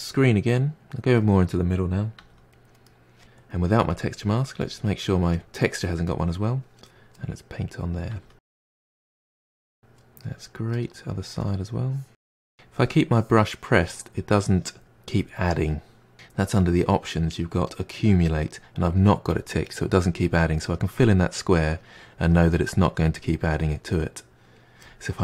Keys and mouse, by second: 0.8 click, 2.2 f, 2.9-3.9 middle drag, 3.9-5.4 drag, 6.1 click, 6.9-7.7 middle drag, 7.7-8.1 drag, 8.1 f, 8.9-9.9 drag, 9.9-11.6 middle drag, 11.6-13.8 drag, 16.6-19.6 drag, 19.7-25.2 middle drag.